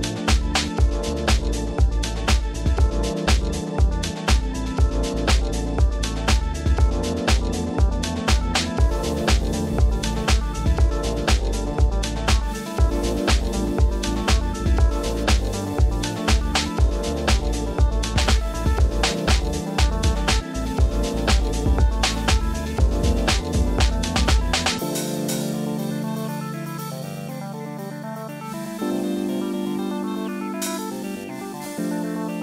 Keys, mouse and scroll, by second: 0.0-0.7 typing, 0.7 click, 0.8 middle click, 1.0 shift+middle click, 1.3 middle click, 1.3 click, 1.8 shift+middle click, 2.6 middle click, 3.0 click, 3.2 shift+click, 4.3 shift+click, 4.9 shift+click, 4.9-5.9 typing, 5.1 middle click, 5.4 click, 6.3 click, 6.6 middle click, 7.0 shift+middle click, 7.9 g, 8.0 z, 8.5 Escape, 8.8 s, 8.9 z, 10.4 g, 10.5 z, 11.3 click, 11.5 middle click, 12.3 shift+middle click, 13.0 click, 14.1 g, 14.3 z, 14.9 click, 15.1 middle click, 15.7 middle click, 15.9 shift+middle click, 16.7 click, 18.8 click, 19.1 g, 19.5 g, 20.5 g, 21.2 g, 21.7 g, 21.9 click, 22.3 click, 23.0 shift+click, 23.3 g, 23.4 z, 24.6 g, 24.8 z, 25.1 click, 26.0 g, 26.2 z, 26.3 click, 26.6 click, 27.3 shift+click, 27.9-29.6 shift+drag, 29.7 middle click, 30.2 shift+click, 30.5 g, 30.6 z, 31.3 click, 31.6 middle click, 32.0 shift+middle click.